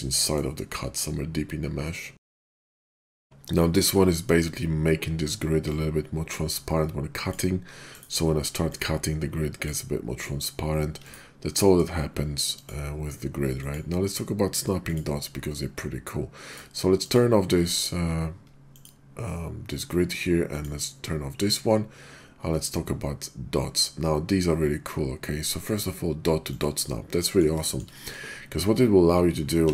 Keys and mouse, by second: 0.9-2.1 middle drag, 2.1 click, 2.3 right click, 3.0 middle click, 3.6 middle click, 5.7-7.3 ctrl+drag, 7.9 click, 8.7-9.7 ctrl+drag, 11.1 click, 11.6 middle click, 12.6-16.6 drag, 16.9 click, 18.7-26.7 drag, 27.2 middle drag, 27.9 middle drag, 29.6 x.